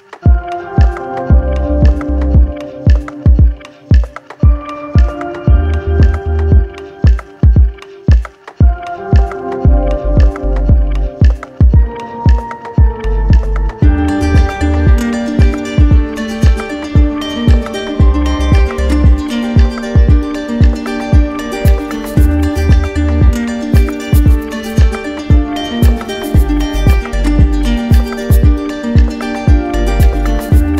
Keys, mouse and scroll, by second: 0.1 ctrl+click, 1.2 alt+click, 2.6 alt+click, 5.9 ctrl+click, 6.6 ctrl+click, 10.3 click, 11.0 ctrl+click, 14.2 ctrl+click, 14.8 ctrl+click, 18.9 click, 19.7 ctrl+click, 22.0 click, 22.4 shift+click, 24.8 ctrl+click, 25.3 ctrl+click, 29.1 click, 29.8 ctrl+click.